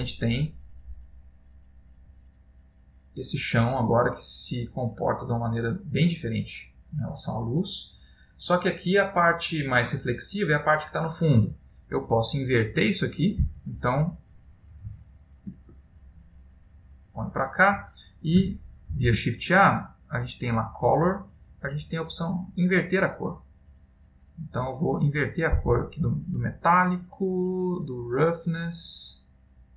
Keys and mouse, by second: 9.3 middle click, 13.0 click, 14.6 middle click, 15.2 ctrl+middle click, 16.1 click, 19.0 shift+a, 27.3 click.